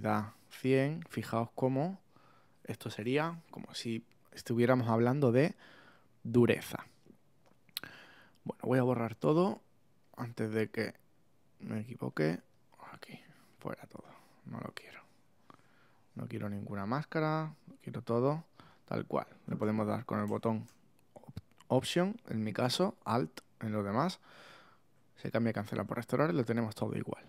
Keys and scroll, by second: 1.7 super+z.